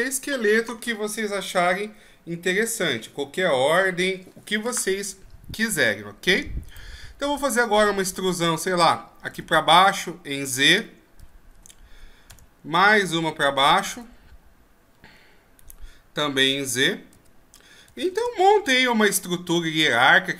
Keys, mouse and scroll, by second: 6.7 right click, 9.3 e, 13.9 e, 19.2 middle click.